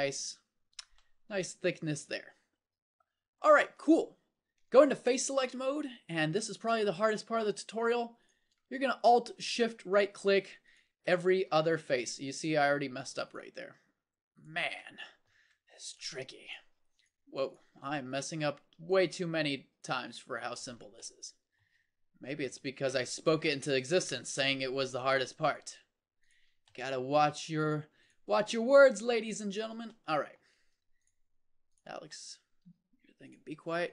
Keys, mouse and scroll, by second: 4.5 ctrl+Tab, 11.5 ctrl+z, 29.9 middle click.